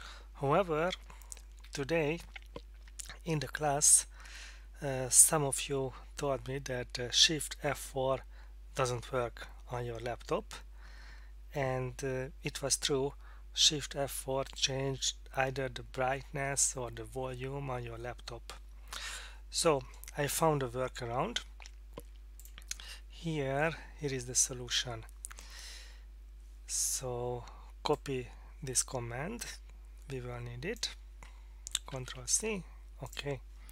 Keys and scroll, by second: 1.6 Escape, 31.9 ctrl+c.